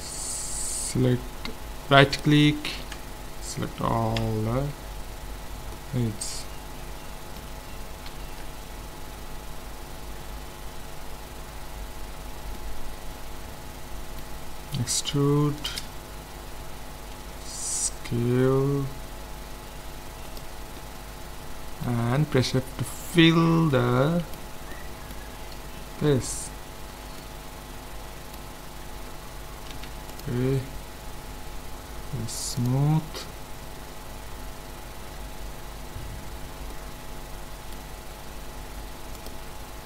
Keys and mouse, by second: 2.0-3.8 right drag, 3.8 middle click, 4.2 z, 4.8 z, 8.1 KP_1, 12.5-14.7 middle drag, 14.8 e, 17.1 s, 20.8-25.6 middle drag, 22.3 f, 28.8 Tab, 29.7 ctrl+s, 32.6-34.4 drag, 36.7-39.2 middle drag, 39.2-39.8 drag.